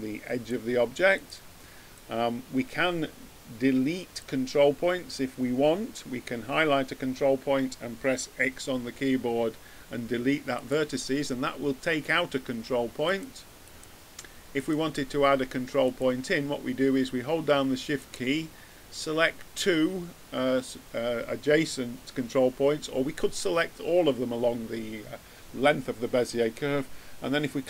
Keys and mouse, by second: 8.3 x, 13.0-17.6 drag, 18.0-19.8 drag.